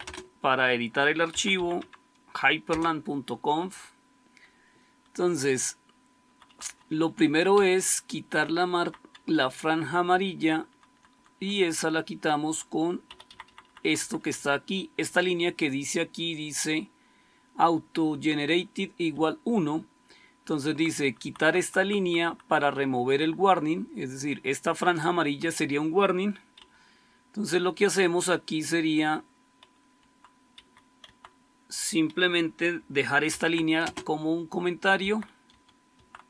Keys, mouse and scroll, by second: 0.0-2.6 typing, 6.1 Down, 6.4 Down, 6.6 Down, 6.7 Down, 6.9 Down, 7.1 Down, 7.4 Up, 7.9-8.7 Up, 9.0 Down, 9.6-10.3 Down, 10.5 Down, 10.8 Down, 11.0 Down, 11.2 Down, 12.4 Down, 13.0 Up, 13.2 Up, 13.4 Up, 13.6 Up, 13.7 Up, 13.9 Up, 14.1 Up, 14.3 Up, 19.0 Right, 19.5 Right, 20.9 Right, 21.1 Right, 21.5 Right, 21.7 Right, 21.9 Right, 22.1 Right, 26.5 Up, 29.8 Down, 30.4 Up, 30.9 Right, 33.1 #, 33.7 space, 34.8 Left, 35.4 Delete, 35.8 Right.